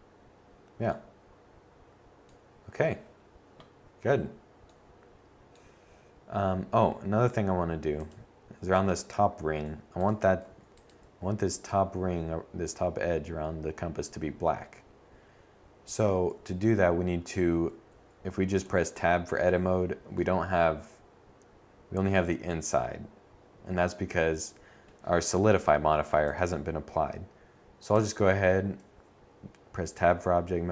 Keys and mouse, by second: 7.5 Tab, 7.9 Tab, 15.0 Tab, 16.1 Tab, 16.4 Tab, 26.3 Tab.